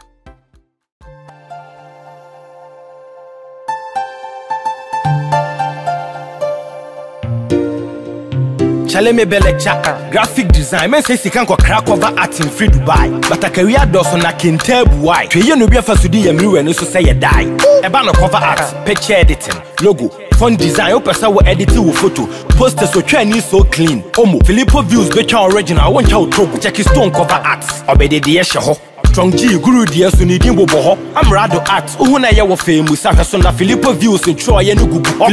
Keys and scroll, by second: 4.1 ctrl+j, 12.4 ctrl+-.